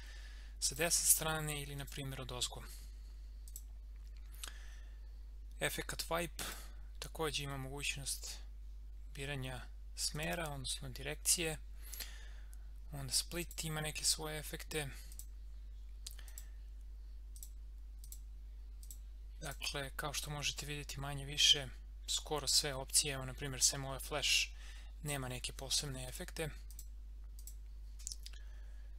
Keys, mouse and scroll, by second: 6.4 click, 10.1 click, 13.4 click, 26.1 click.